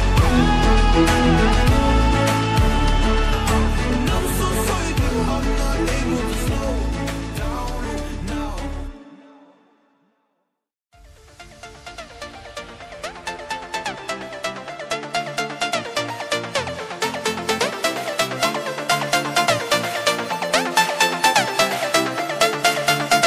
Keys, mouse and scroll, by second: 0.4 scroll up 1, 1.3 scroll down 1, 2.4 scroll up 1, 3.2 click, 7.2 click, 7.7 Delete, 11.8 scroll up 1, 12.4 scroll down 1, 13.5-14.3 scroll up 1, 14.6 shift+scroll up 1, 16.6 click.